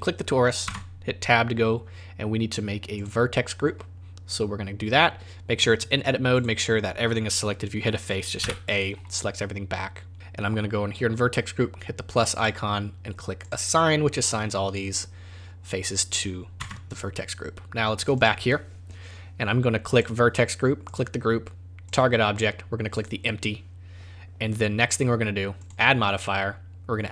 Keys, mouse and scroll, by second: 0.7 Tab, 3.0 click, 6.3 click, 8.4 a, 12.4 click, 13.4 click, 16.6 Tab, 18.1 click, 19.9 click, 21.8 click, 25.6 click.